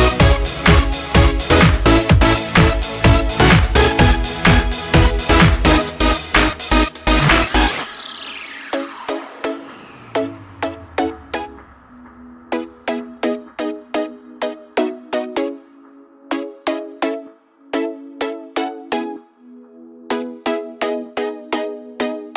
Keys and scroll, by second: 14.0 ctrl+space, 16.8 ctrl+Return, 20.8 ctrl+space, 21.2 ctrl+space, 21.4 ctrl+space.